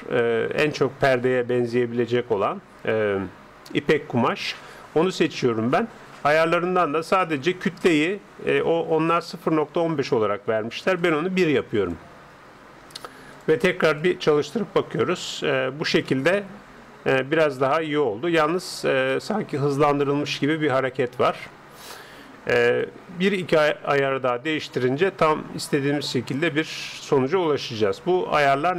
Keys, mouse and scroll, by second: 11.0-12.7 drag, 13.3-15.7 drag, 16.1-20.9 middle drag, 21.9-24.5 drag.